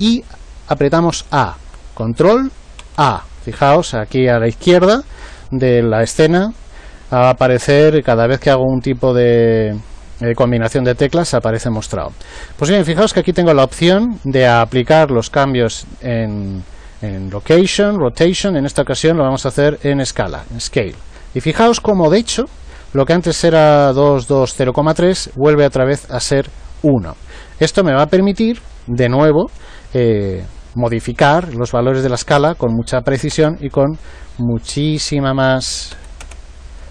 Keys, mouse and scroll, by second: 2.8 ctrl+a, 28.4 click, 35.0 click.